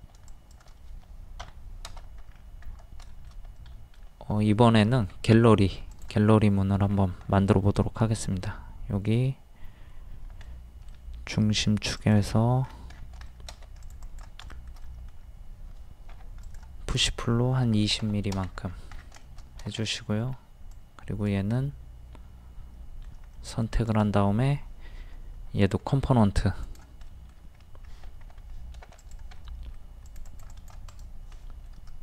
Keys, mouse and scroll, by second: 0.3 shift+click, 1.4 Delete, 2.3-2.6 scroll up 1, 3.1 shift+middle click, 5.1 r, 5.9 click, 6.8-7.2 scroll up 1, 10.5-11.5 middle drag, 12.0 click, 12.4 middle click, 13.3 shift+middle click, 13.8 click, 14.5 shift+middle click, 16.1 p, 16.4 click, 17.7 KP_2, 18.6-19.2 scroll down 1, 19.2 shift+middle click, 20.7 click, 21.6-23.9 middle drag, 23.9 right click, 25.6 click, 27.1 middle click, 27.6-28.0 scroll up 1, 28.3 ctrl+z, 28.5 middle click, 29.0 click, 29.3 middle click, 30.1 click, 30.9 right click, 31.4 middle click.